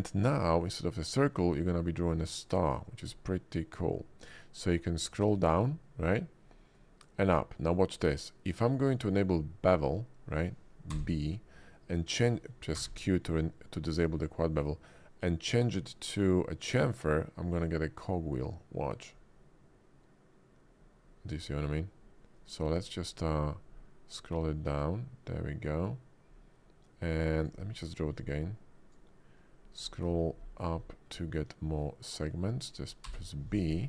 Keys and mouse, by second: 0.9-3.1 drag, 10.9 b, 12.8 q, 27.4 click, 27.7-28.9 drag, 33.0 b.